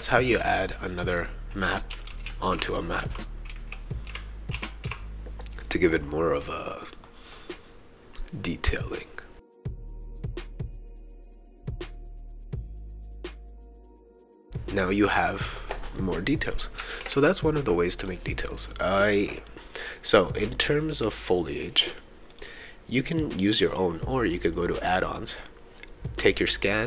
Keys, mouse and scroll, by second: 1.2-5.4 right drag, 1.7-5.3 typing, 10.6 right click, 10.7 d, 11.6 click, 11.8-14.5 typing, 11.9 click, 12.0-13.1 shift+right drag, 13.2 click, 13.6 right click, 16.9 ctrl+s, 18.0 click, 18.5-20.3 right drag, 21.2 click, 22.3 click.